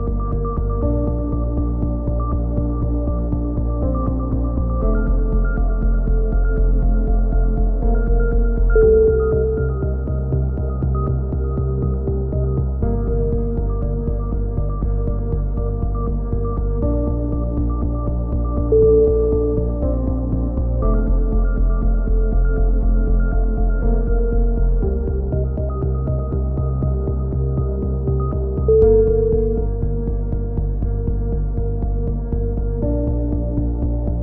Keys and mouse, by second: 0.0-2.2 right drag, 2.2-3.8 middle drag, 3.8 click, 5.4 a, 6.2-7.4 right drag, 7.4 middle click, 7.6 right click, 8.9 a, 10.0 right click, 11.3-13.5 right drag, 14.0-15.1 right drag, 15.2 click, 17.0 r, 18.3 click, 18.6 ctrl+z, 19.2 right click, 19.9 ctrl+z, 20.4-22.8 right drag, 22.8 click, 23.6 a, 24.0 z, 25.3 KP_3, 25.7 z, 26.4-29.0 drag, 28.9 r, 32.4-34.0 right drag, 34.0 r.